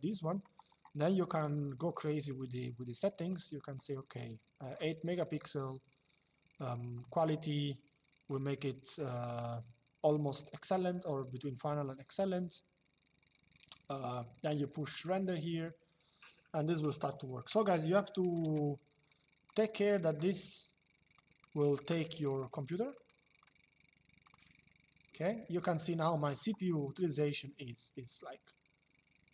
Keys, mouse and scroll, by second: 3.0 click, 6.6 click, 8.0 click, 14.5 click.